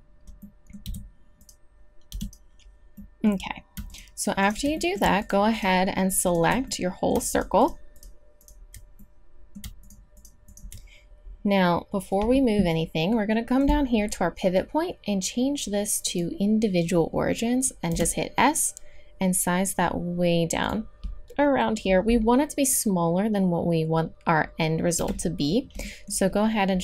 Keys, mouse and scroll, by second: 0.8 g, 2.1 e, 3.8 click, 7.0 click, 7.5-8.6 middle drag, 9.0 middle click, 9.2-12.8 middle drag, 15.6 middle click, 17.9 s, 20.8 click, 24.9 KP_3, 25.8 click, 26.1-26.8 middle drag.